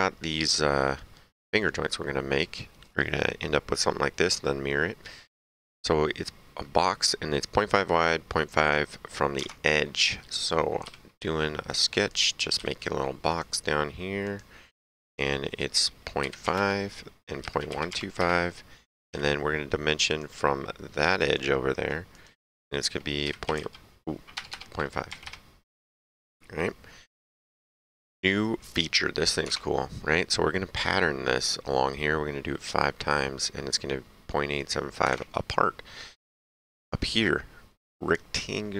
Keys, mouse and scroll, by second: 9.3 alt+Tab, 11.6 click, 12.5 s, 13.3 click, 16.2-17.7 typing, 16.5 KP_Enter, 18.1 KP_Enter, 19.0 d, 20.0 click, 21.1 click, 23.2 KP_Decimal, 23.5 KP_2, 24.3 BackSpace, 25.0 KP_5, 25.2 KP_Enter, 29.4 alt+Tab, 35.1 alt+Tab.